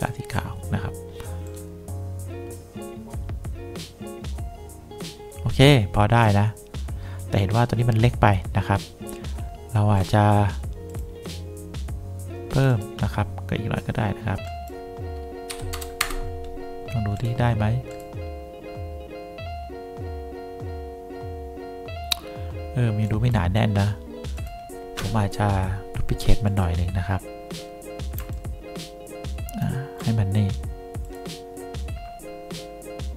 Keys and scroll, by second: 15.4-16.3 typing.